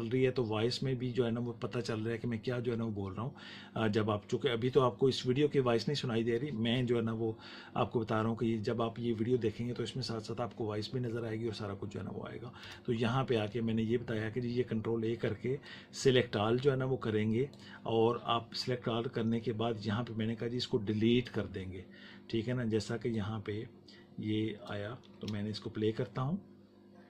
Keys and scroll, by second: 12.5 BackSpace, 25.1 space.